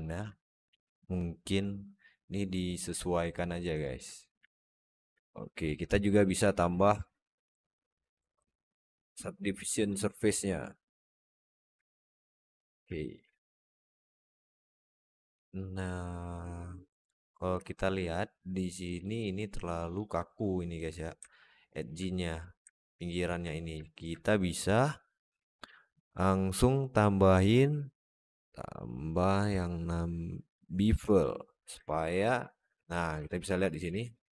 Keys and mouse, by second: 1.5-2.7 shift+right drag, 3.2-3.5 alt+middle drag, 3.7 alt+shift+middle drag, 4.3-4.9 alt+middle drag, 5.7 click, 8.4-9.7 alt+middle drag, 11.1 click, 11.7-12.0 alt+middle drag, 12.1 alt+shift+middle drag, 12.8 alt+shift+middle drag, 13.1-16.9 alt+middle drag, 17.5-17.8 alt+shift+middle drag, 18.8 alt+shift+middle drag, 19.4-19.8 alt+shift+middle drag, 21.1-21.7 alt+shift+middle drag, 22.5 alt+middle drag, 22.9 alt+shift+middle drag, 23.7 alt+shift+middle drag, 25.5 drag, 26.0-31.0 drag, 31.7 alt+shift+middle click, 33.1 alt+shift+middle click, 33.7 alt+z.